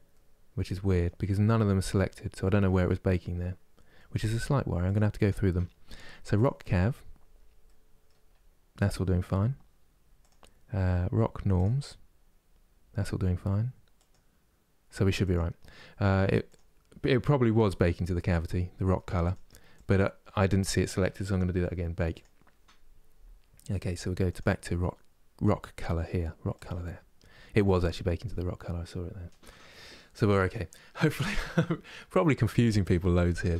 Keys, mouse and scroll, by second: 6.1-19.0 drag, 22.4 click, 24.4-27.4 drag, 27.4 scroll down 8, 27.9-30.9 scroll up 4.